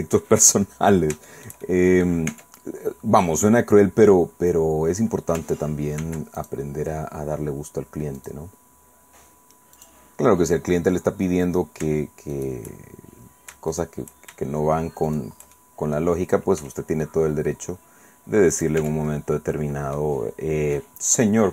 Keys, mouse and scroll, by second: 0.9-1.3 scroll down 3, 1.3 shift+middle click, 2.3 Tab, 2.9-3.5 scroll up 2, 6.0 ctrl+r, 6.4 ctrl+click, 8.2 click, 9.8 click, 10.2-10.6 scroll up 2, 10.6-11.4 scroll down 2, 12.3 shift+right click, 13.7 shift+right click, 15.1 shift+middle click, 15.5 shift+middle click, 16.6 e, 18.5 click, 18.8 Tab, 20.7 click.